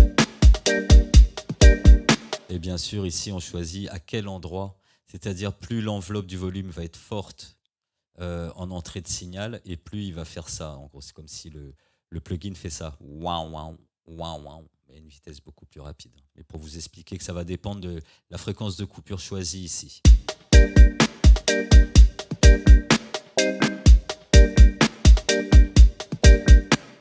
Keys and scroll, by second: 2.3 space, 2.4 c, 2.5 space, 20.0 space, 26.8 space.